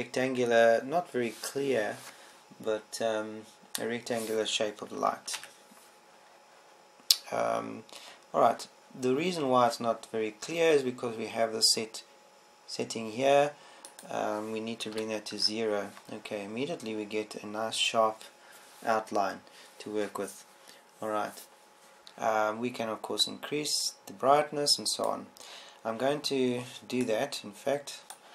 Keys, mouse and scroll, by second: 6.9 ctrl+Up, 24.7-26.9 drag.